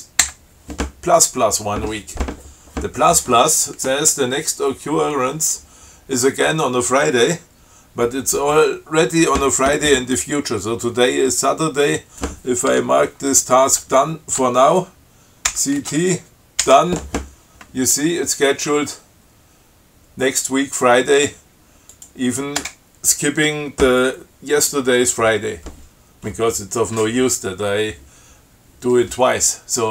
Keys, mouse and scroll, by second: 15.7 ctrl+c, 16.0 ctrl+t, 16.9 d, 22.1 click, 22.8 Return.